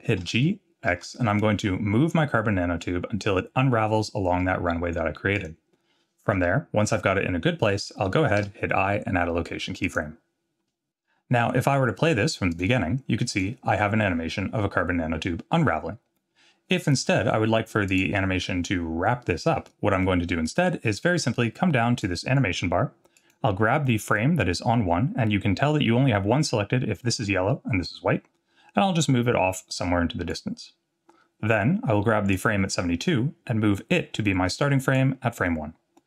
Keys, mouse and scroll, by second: 0.2-0.9 scroll down 1, 0.2 g, 8.4 i, 12.5 click, 13.3 click, 17.9 click, 22.0 click, 23.1 click, 24.1-25.7 drag, 28.8-30.3 drag, 32.3-35.0 drag.